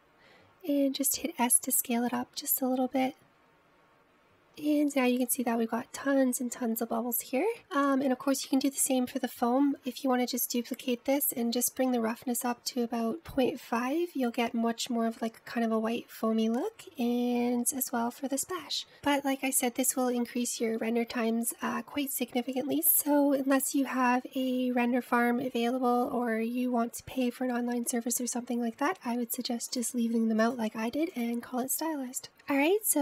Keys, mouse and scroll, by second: 0.8 click, 3.3 s, 5.6-6.0 scroll down 2, 7.3 scroll up 2, 8.0 scroll down 1, 24.0-25.0 drag, 31.6 click, 32.6 click.